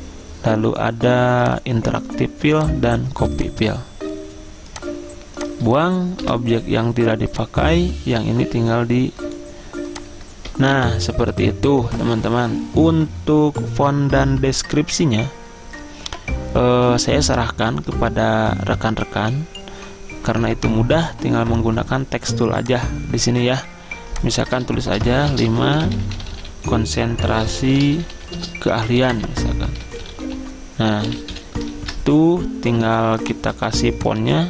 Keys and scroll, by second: 6.3 Delete, 25.1-31.9 typing.